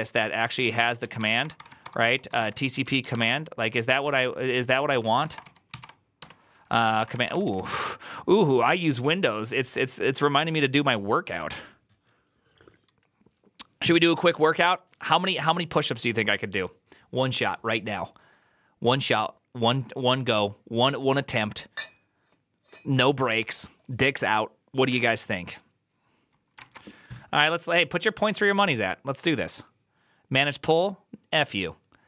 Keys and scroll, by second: 0.0-8.1 typing.